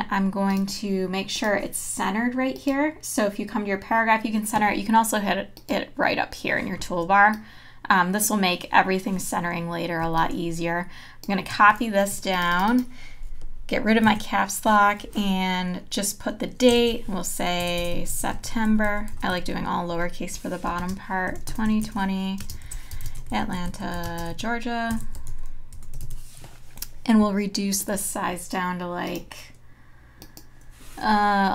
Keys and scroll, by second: 12.1 t, 16.5-25.0 typing, 26.1 a.